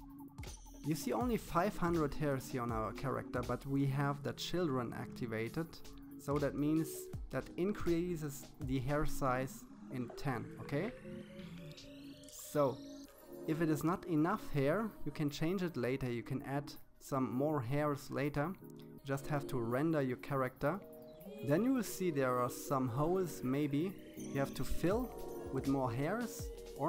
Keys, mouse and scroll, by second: 1.2-2.8 drag, 5.4 KP_3, 7.7 KP_1, 8.6-9.8 shift+middle drag, 9.8 KP_7, 11.9-13.5 drag, 16.2-17.8 drag, 18.1-19.7 middle drag, 23.2-24.4 middle drag, 24.4-26.0 drag.